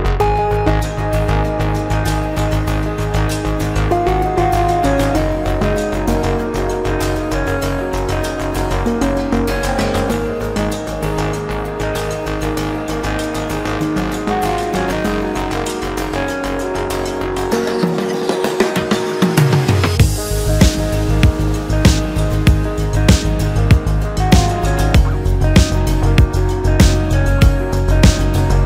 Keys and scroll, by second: 0.1 Escape, 2.0 Return, 4.2 Return, 5.9 Escape, 6.8 Delete, 7.2 F3, 8.4 Return, 8.6 Escape, 11.5 alt+z, 14.4 Escape, 20.5 Return.